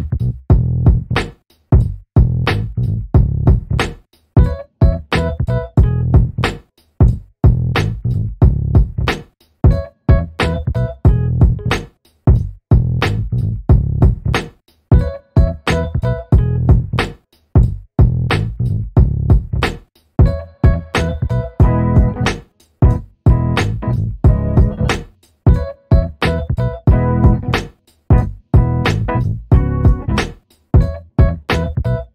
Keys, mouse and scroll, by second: 0.1 alt+middle click, 1.4 click, 3.2 alt+middle click, 5.8 click, 11.4 alt+middle click, 11.7-12.0 alt+scroll up 2, 12.0 alt+middle click, 13.1 click, 13.8 scroll down 1, 14.0 alt+middle click, 14.9 click, 16.7-17.1 scroll up 1, 17.1 alt+middle click, 18.0 click, 21.8 shift+v, 23.8 alt+click.